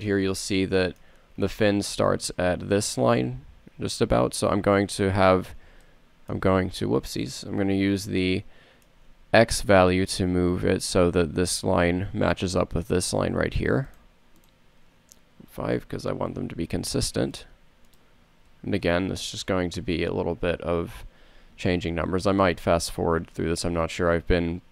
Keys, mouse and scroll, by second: 6.6 KP_7, 18.2 BackSpace, 19.4 BackSpace, 22.5 n, 23.0 n.